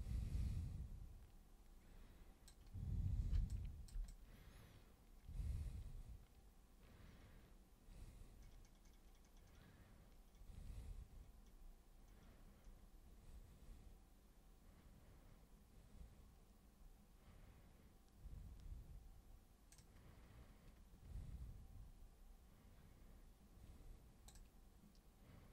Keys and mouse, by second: 3.3 super+b, 3.5 click, 4.1-19.7 super+drag.